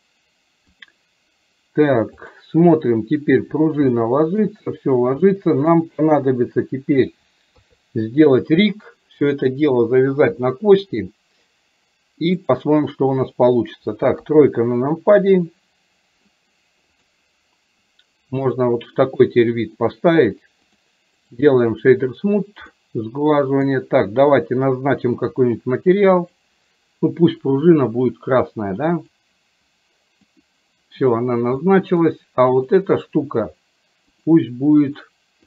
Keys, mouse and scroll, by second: 4.1-4.5 shift+middle drag, 5.4 middle click, 12.4 click, 21.2-22.7 right drag, 22.7-23.7 middle drag, 27.5 click, 30.4 click, 31.6-32.1 middle drag.